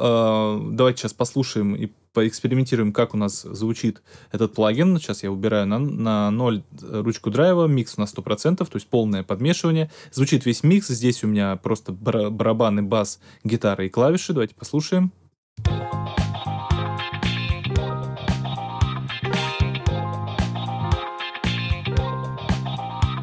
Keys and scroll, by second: 15.5 space.